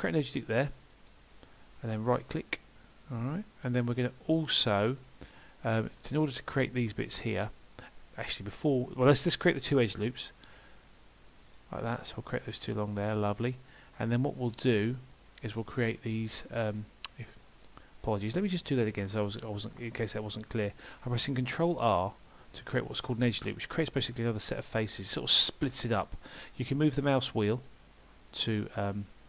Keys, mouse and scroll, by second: 17.5 middle click, 18.7 ctrl+z, 21.1 ctrl+r.